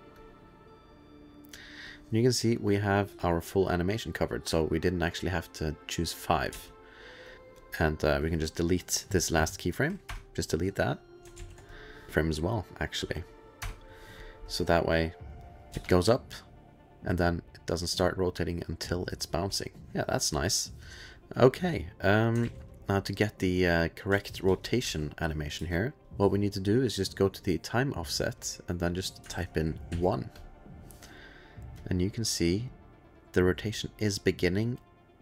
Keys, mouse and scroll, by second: 0.2 click, 1.1 click, 1.3 alt+click, 1.7 click, 3.1 click, 3.1 space, 6.5 space, 7.3 click, 7.3 click, 7.6 click, 8.7 click, 8.7 middle click, 10.1 BackSpace, 10.8 click, 11.3 shift+s, 11.6 click, 12.1 click, 12.1 middle click, 13.6 BackSpace, 14.6 click, 15.3 click, 15.7 space, 20.2 space, 20.4 ctrl+s, 20.8 click, 21.2 ctrl+s, 21.6 click, 22.0 click, 24.1 space, 24.4 space, 25.3 ctrl+s, 25.5 space, 26.0 space, 28.9 click, 29.3 ctrl+a, 29.9 1, 30.4 click, 31.8 click, 32.5-35.2 drag, 32.5 2.